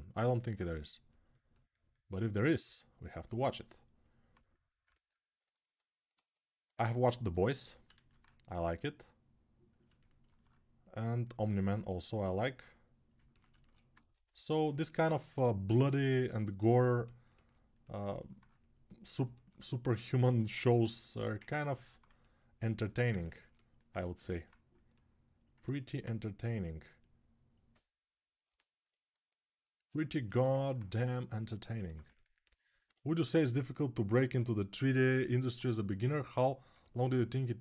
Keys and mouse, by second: 3.0-7.4 ctrl+alt+right drag, 6.0 alt+q, 7.7 alt+q, 13.5 alt+click, 13.6 alt+right click, 13.7-18.3 ctrl+alt+drag, 20.3-22.6 ctrl+alt+drag, 32.0 alt+shift+click, 36.7-37.6 alt+shift+drag.